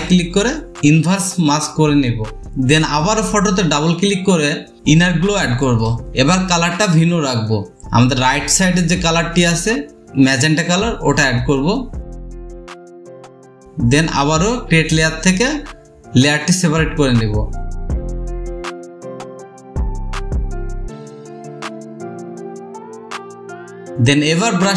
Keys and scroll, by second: 22.6 ctrl+i, 22.7 space.